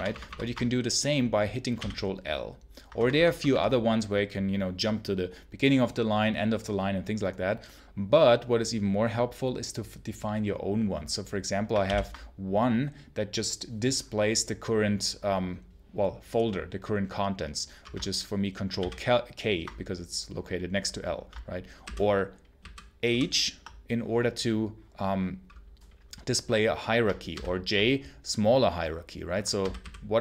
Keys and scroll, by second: 1.6 ctrl+l, 2.8 Return, 3.0 Return, 3.4 Return, 11.7 ctrl+k, 18.6 ctrl+k, 21.7 ctrl+h, 22.5 ctrl+h, 22.9 ctrl+h, 27.2 ctrl+j, 29.5 ctrl+j, 29.7 ctrl+h.